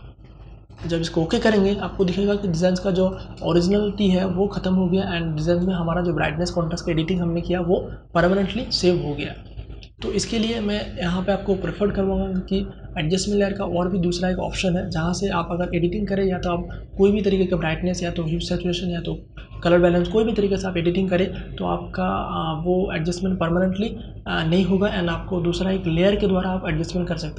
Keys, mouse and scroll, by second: 0.9 space, 1.2-12.0 ctrl+drag.